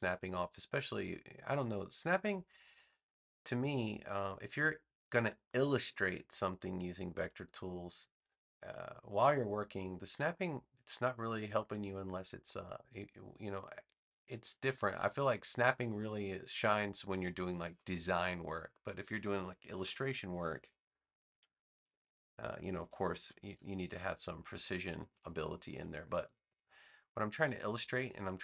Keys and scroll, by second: 19.7 BackSpace, 21.9 super+j, 23.1 v.